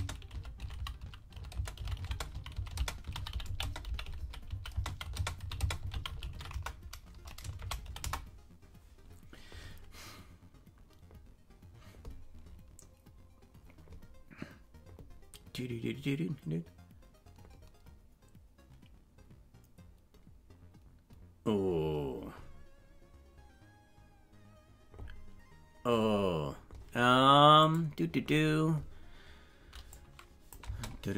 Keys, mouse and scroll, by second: 30.3 click, 30.4 click, 30.7 space.